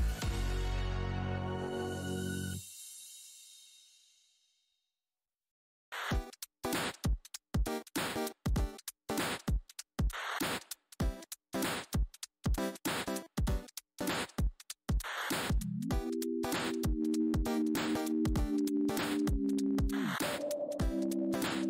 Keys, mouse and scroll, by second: 2.4 click, 4.6 Left, 9.1 ctrl+w, 9.7 w, 11.9 click, 12.0 w, 12.3 shift+x, 14.3-16.2 typing, 15.3-15.6 alt+scroll up 1, 16.7 alt+click, 16.9 alt+scroll down 1, 17.6-18.0 alt+scroll, 19.7 right click, 20.2 click, 20.9 right click, 21.4 alt+scroll down 1.